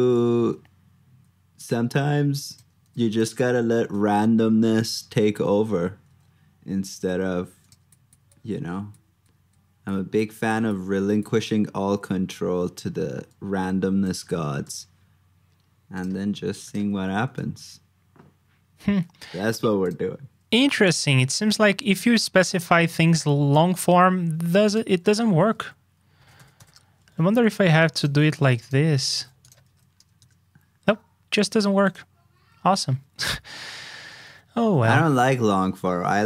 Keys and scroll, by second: 0.0 super+v, 2.8 super+c, 3.4 super+v, 5.0 super+Tab, 6.7 super+z, 16.3 super+c, 16.8 super+v, 29.0 super+c, 29.6 super+v, 32.3 super+z.